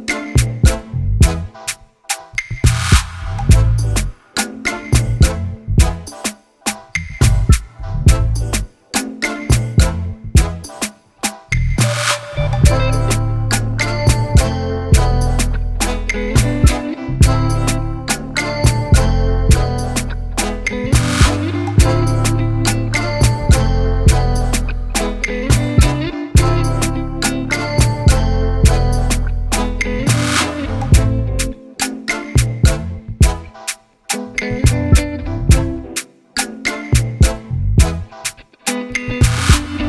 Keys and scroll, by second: 39.6 ctrl+z.